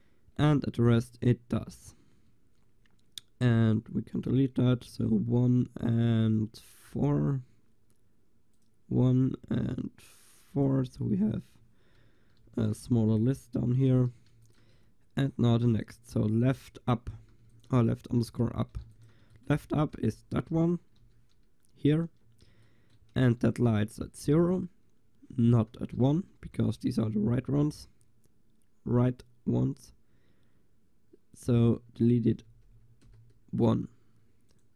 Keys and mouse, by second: 8.6-10.6 drag, 12.4 middle click, 12.4 ctrl+s, 14.4 ctrl+s, 17.5 ctrl+s, 19.0 ctrl+s, 19.7 Tab, 20.1 a, 21.1 l, 22.1 Tab, 31.4-33.4 drag, 32.4 BackSpace, 34.6-34.7 drag.